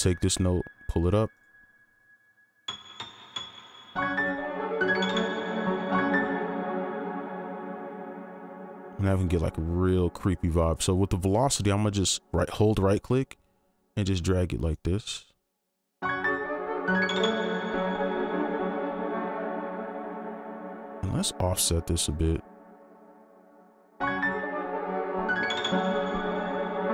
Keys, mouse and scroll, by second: 1.2 scroll down 1, 5.9 space, 9.4 right click, 18.4 right click, 20.8 ctrl+click, 23.8 right click, 23.9 space, 26.2 right click.